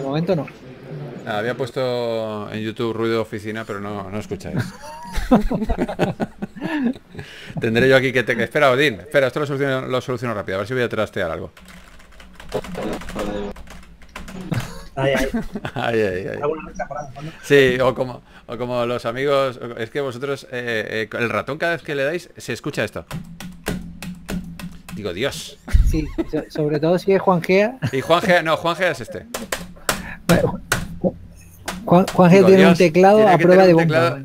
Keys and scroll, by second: 0.7 s, 1.8-2.8 typing, 2.4 super+z, 7.9 super+Tab, 8.6 super+Tab, 14.5 s, 16.2 typing, 17.6 s, 19.8 typing, 23.4-25.8 typing, 28.2-29.9 typing, 33.0 s.